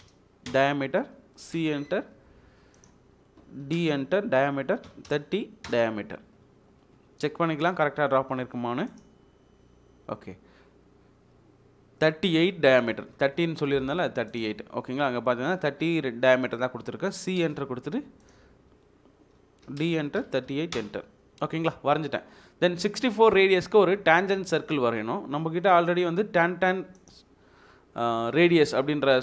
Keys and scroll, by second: 0.0-0.4 typing, 0.5 Return, 1.5 c, 1.5 space, 3.7 d, 3.8 space, 4.9 typing, 5.6 Return, 16.4 Delete, 17.3 c, 17.4 space, 19.7-20.4 typing, 20.7 Return.